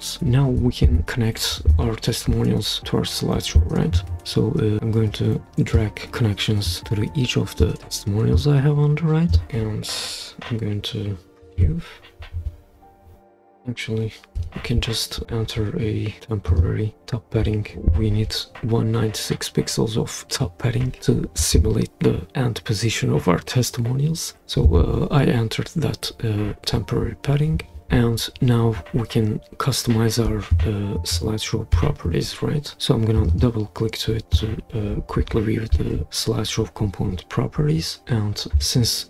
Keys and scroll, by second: 11.5 super+p, 14.3 Escape.